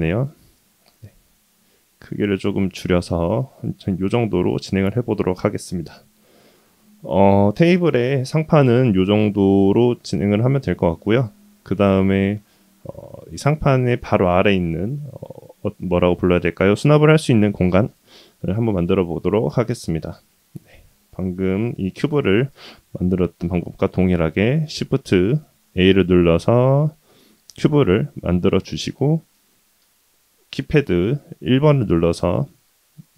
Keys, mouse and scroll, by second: 2.6-5.3 middle drag, 5.7-6.3 middle drag, 6.5-7.0 scroll up 2, 7.0 scroll down 1, 7.1 scroll down 1, 7.2-8.3 middle drag, 9.5 shift+middle drag, 10.1-10.5 middle drag, 11.0 shift+middle drag, 11.6-12.4 middle drag, 12.8-13.9 middle drag, 19.0-19.6 middle drag, 25.4 shift+a, 28.3-29.2 middle drag, 29.5 KP_1, 32.0-33.1 scroll up 2.